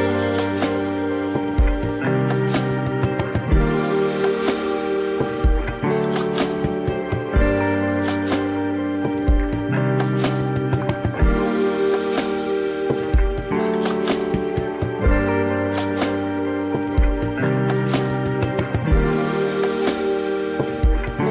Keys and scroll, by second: 9.6 space, 12.1 ], 13.8 ], 16.1 ].